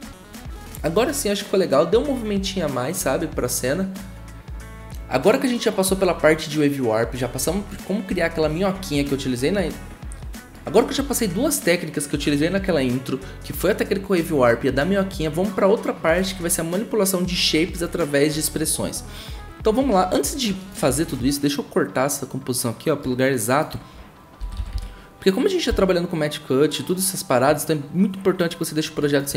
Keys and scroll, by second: 24.4-25.7 typing.